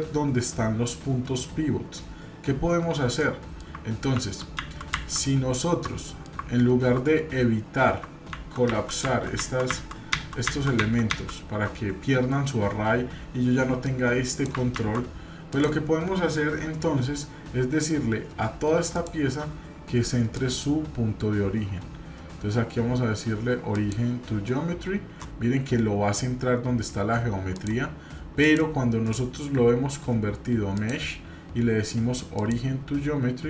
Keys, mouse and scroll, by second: 3.2-3.7 middle drag, 4.1 ctrl+z, 4.6 ctrl+z, 5.8-6.3 middle drag, 7.5 scroll up 1, 8.3 ctrl+z, 8.7 ctrl+z, 9.7 ctrl+z, 13.8 click, 14.8 ctrl+z, 15.4 click, 18.9-19.4 shift+drag, 20.3-23.9 drag, 27.5 drag, 28.4 click, 29.0-30.9 right drag, 32.3-33.4 drag.